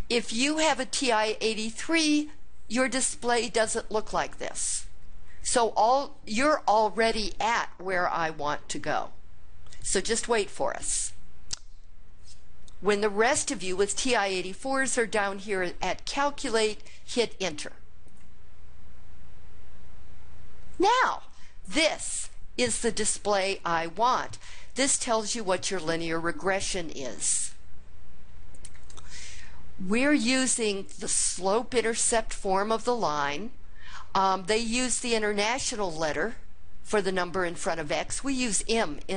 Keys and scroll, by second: 17.9 Return.